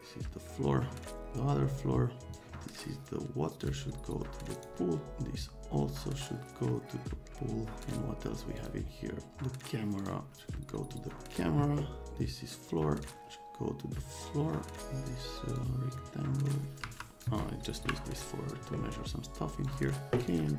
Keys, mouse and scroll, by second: 2.3 click, 3.6 click, 4.5 click, 7.8 click, 8.6 click, 10.0 click, 10.4 click, 13.0-14.9 drag, 15.5-17.1 drag, 16.8 F3, 17.1 right click, 17.2 click, 17.8 Delete, 19.6 click, 20.3 click.